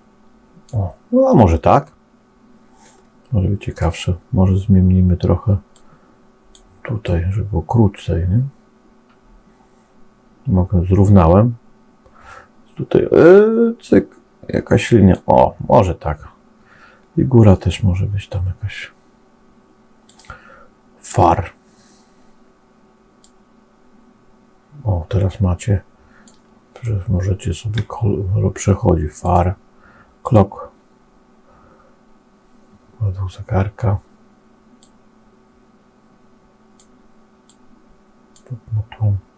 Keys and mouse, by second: 1.7-3.7 middle drag, 5.7 click, 6.9-15.1 drag, 19.9-21.1 drag, 23.1-26.2 drag, 26.7 middle click, 29.1-30.3 drag, 34.7-36.6 drag, 37.3 click.